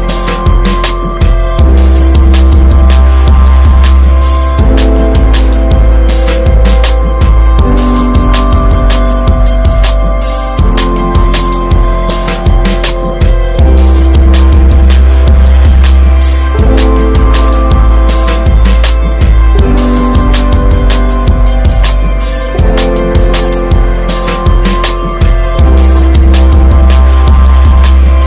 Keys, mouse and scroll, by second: 2.6 ctrl+s, 5.1-13.2 middle drag, 13.2 click, 13.6-14.3 middle drag, 14.3-14.7 scroll up 1, 14.7-17.5 middle drag, 18.5-20.0 shift+middle drag, 20.0 drag, 20.6 /, 21.0-22.3 middle drag, 22.3 /, 22.7 scroll down 2, 22.9 drag, 23.1-25.0 middle drag, 25.0 KP_0, 26.6-27.8 drag.